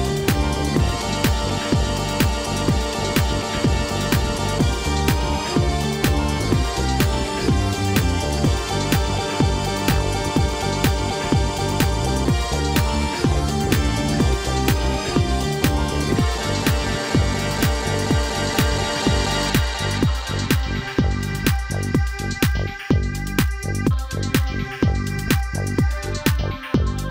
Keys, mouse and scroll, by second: 4.2 middle click, 5.0-6.0 scroll up 1, 6.0 click, 6.5 shift+click, 7.2 KP_1, 7.8-8.3 scroll down 2, 8.4 e, 10.5 scroll down 2, 11.7-12.1 ctrl+KP_8, 13.2-13.6 scroll up 2, 14.3 KP_3, 17.3 scroll up 2, 18.8 click, 19.6 shift+click, 20.8-21.4 scroll down 2, 21.4 KP_1, 23.6 e.